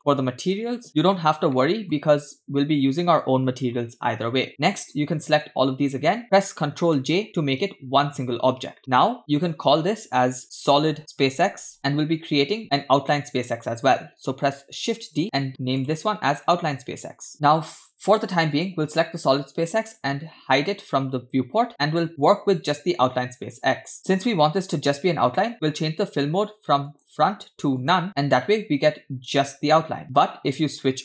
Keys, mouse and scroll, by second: 0.4 click, 0.9 middle click, 0.9 scroll down 2, 1.6-1.9 shift+middle drag, 4.6 scroll down 1, 5.0-6.0 drag, 7.0 ctrl+j, 9.2 scroll up 1, 9.2-11.8 drag, 15.0 shift+d, 15.8 click, 16.0-17.3 drag, 18.5 click, 19.9 click, 22.2 click, 24.4-25.3 scroll up 2, 26.9-28.0 drag, 30.0 shift+middle click.